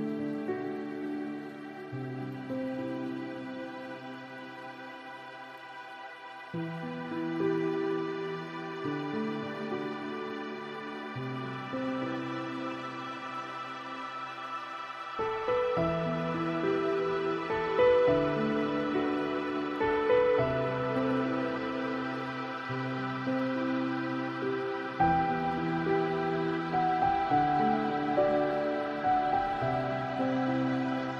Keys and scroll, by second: 20.1 ctrl+a, 24.1 ctrl+d.